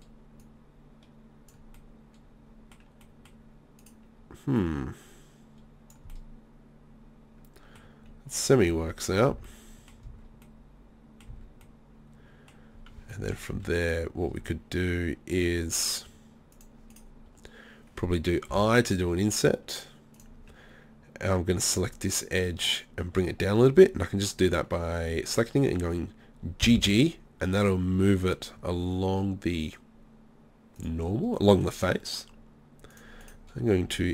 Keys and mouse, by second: 1.8-3.8 middle drag, 3.8-5.8 right drag, 4.6-6.4 drag, 4.6-5.8 middle drag, 6.1-7.3 middle drag, 8.7 z, 9.3 z, 10.1 z, 11.3 z, 13.6-16.6 middle drag, 13.6 z, 14.3 z, 16.6 click, 16.9 right click, 18.5-20.2 drag, 18.5 i, 20.2-22.4 drag, 26.6 g, 30.9-34.1 drag, 31.4-32.5 middle drag, 33.2-34.1 middle drag.